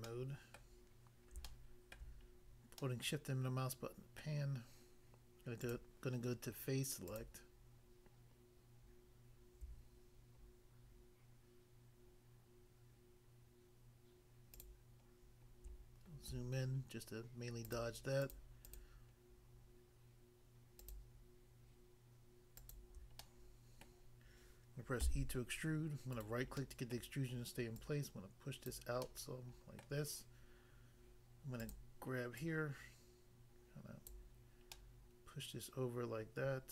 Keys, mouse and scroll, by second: 0.1 middle click, 0.5 middle click, 1.4 shift+middle click, 4.2 middle click, 5.7 click, 7.1 click, 7.2 click, 14.5 shift+click, 14.6 shift+click, 15.7 scroll up 1, 17.6 shift+click, 17.7 shift+click, 18.7 shift+double click, 20.8 shift+click, 22.6 shift+click, 22.8 shift+click, 23.2 middle click, 23.9 middle click, 25.1 e, 26.2 right click, 26.3 right click, 26.6 middle click, 26.9 middle click, 27.8 click, 28.8 click, 29.0 middle click, 29.8 middle click, 31.6 click, 31.7 click, 32.4 click, 34.1 click, 34.8 middle click.